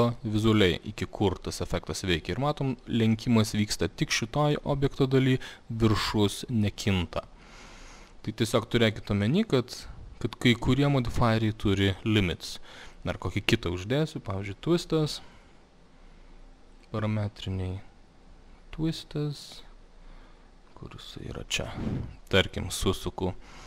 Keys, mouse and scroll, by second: 0.9 click, 4.9 click, 5.9 click, 10.6 click, 13.0 click, 15.0 click, 16.9 click, 21.2 click.